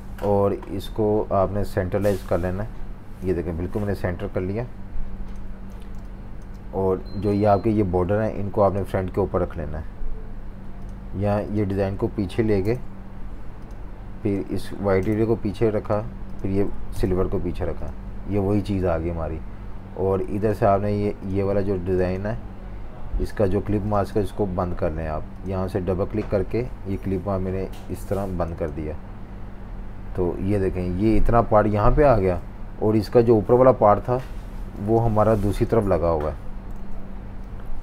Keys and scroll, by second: 0.6 v, 5.7-6.4 typing, 33.8 super+-, 34.0 super+-, 34.8-36.0 typing, 36.7 super+-, 37.5-37.8 typing.